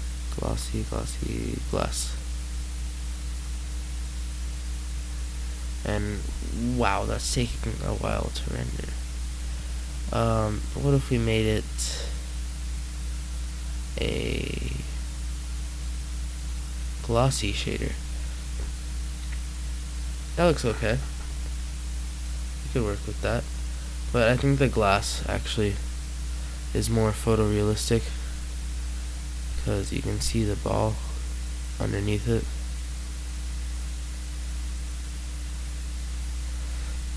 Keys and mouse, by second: 18.3 middle click, 20.8 middle click, 29.6 middle click, 30.4 middle click, 31.5 middle click.